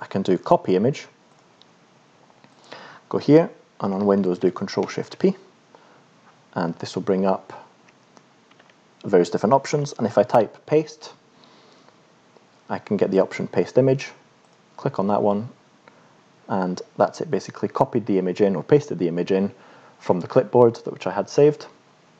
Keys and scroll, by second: 4.8 ctrl+shift+p, 7.8-10.8 typing.